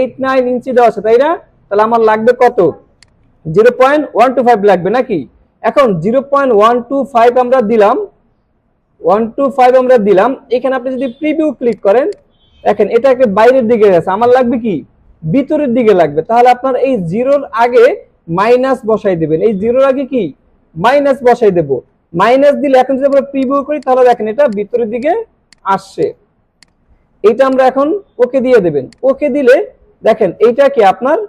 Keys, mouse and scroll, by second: 3.0-3.6 drag, 11.8 click, 17.4 click, 23.0 click, 23.8 click, 25.0 click, 26.0 click, 26.6 click, 28.8 click.